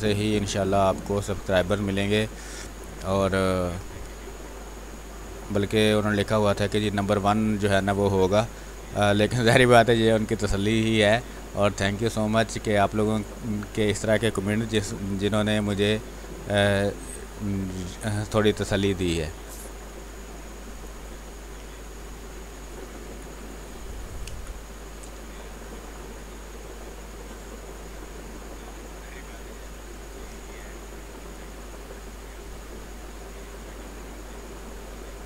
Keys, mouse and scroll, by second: 0.0 space, 1.0-2.9 drag, 2.9-7.2 drag, 7.2-9.1 drag, 9.1 x, 9.2 click, 10.4 space, 10.7 alt+click, 13.4 ctrl+click, 14.4 b, 14.7 space, 14.8 click, 15.2 space, 15.8 click, 16.4 x, 16.7-19.7 drag, 19.7-22.0 drag, 22.0 space, 22.2 click, 22.5 space, 23.2 click, 23.9 b, 24.2 space, 24.4 click, 24.7 space, 25.3 click, 25.9 space, 26.1 click, 26.4 space, 27.0-30.2 drag, 30.2 space, 30.4 click, 30.7 space, 31.6 space, 32.6-35.2 drag.